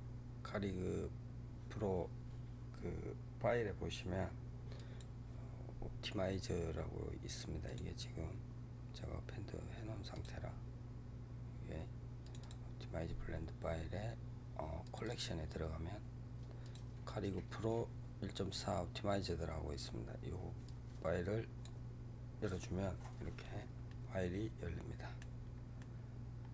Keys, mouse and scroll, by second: 22.4 scroll down 3, 23.3-23.8 scroll down 2, 23.8-25.3 middle drag, 25.3 scroll up 2, 25.7-26.5 middle drag.